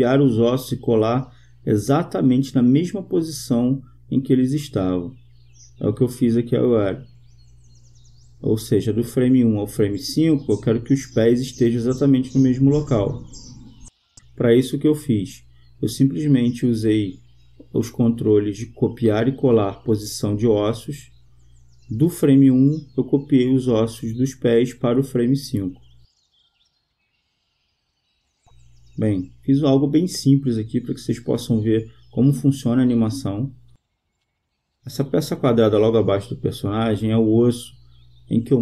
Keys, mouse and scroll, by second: 5.0 right click, 7.5 click, 11.3-13.0 right drag, 12.5-14.2 drag, 16.2-17.6 right drag, 18.0-19.3 right drag, 19.9 click, 21.0 click, 22.6 click, 28.0-31.3 drag.